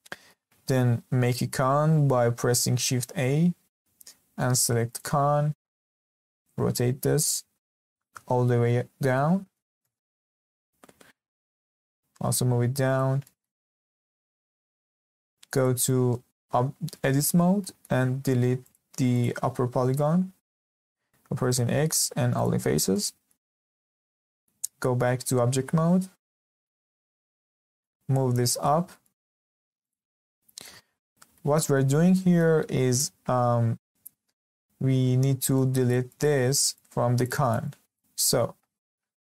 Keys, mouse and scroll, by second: 0.1-3.0 shift+middle drag, 3.0 shift+a, 6.2 r, 11.1 g, 13.2-14.3 shift+middle drag, 14.3-14.6 scroll up 2, 14.6-15.5 shift+middle drag, 15.5 click, 17.1 Tab, 17.6 middle click, 18.3 3, 18.6 click, 19.1 click, 21.3 x, 22.9-24.6 middle drag, 24.6 Tab, 25.0 scroll down 2, 25.2-26.3 middle drag, 26.3 scroll down 2, 26.6-27.9 middle drag, 27.9-28.4 scroll up 2, 28.6 g, 30.0 scroll down 2, 30.3-31.0 shift+middle drag, 31.0 scroll up 1, 31.3 shift+middle click, 31.9 scroll down 1, 32.1-38.9 shift+middle drag.